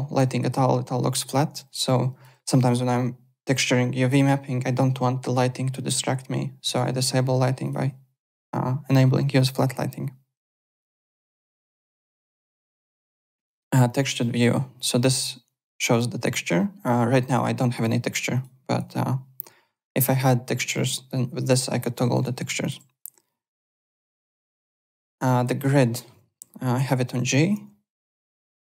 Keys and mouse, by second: 1.8 alt+click, 7.6 click, 10.3 click, 10.7 alt+Tab, 11.3 alt+click, 13.4 click, 14.2 alt+middle click, 15.9 click, 17.8 click, 18.3 click, 20.7 click, 21.4 click, 22.1 alt+Tab, 22.6 alt+click, 24.8 click, 25.3 alt+right click, 25.6 alt+middle click, 26.7 g, 28.1 g.